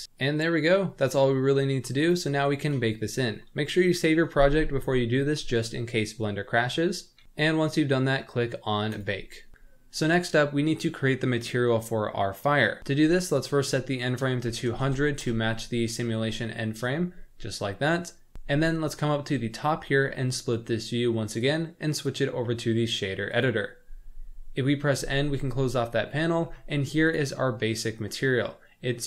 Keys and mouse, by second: 0.2 click, 1.9 click, 7.2 KP_Add, 7.2 ctrl+s, 13.4-15.3 drag, 14.9 KP_0, 20.0 click, 20.2-21.6 middle drag, 22.0-23.5 drag, 25.0 n, 25.8 middle click, 27.1 click, 27.6 middle click, 28.0 click, 28.3 click.